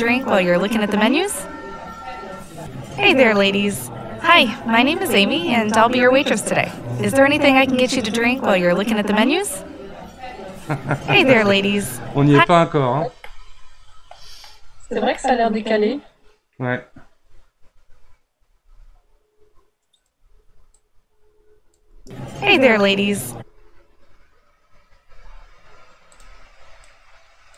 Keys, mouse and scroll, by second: 12.3 space, 13.3-14.5 middle drag, 14.5 scroll up 2, 14.9 scroll down 1, 15.1-18.3 middle drag, 18.5 g, 20.8 click, 21.9 space, 23.3 space, 24.9 g, 26.9 click.